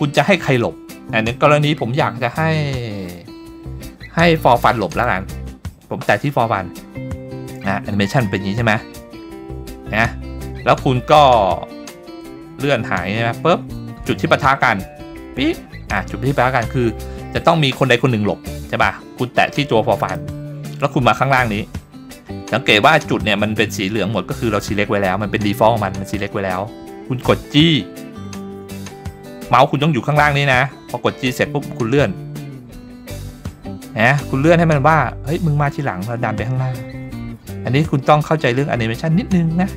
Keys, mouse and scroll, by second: 4.9 click, 9.2-9.8 scroll down 1, 12.2-15.2 drag, 20.0 click, 27.7 g.